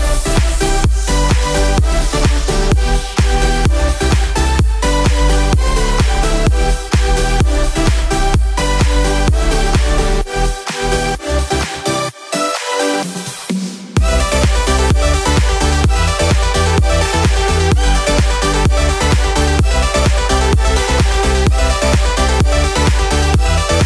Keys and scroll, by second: 7.8 Return.